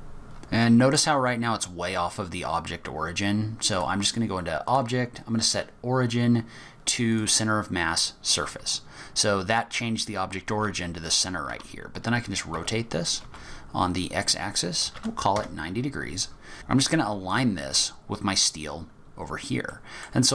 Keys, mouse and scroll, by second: 2.2-3.4 scroll up 8, 3.7 click, 7.7-9.3 scroll up 6, 10.5 r, 16.9-18.0 scroll down 6, 18.0 scroll down 6, 18.9 scroll down 4, 19.7 middle click.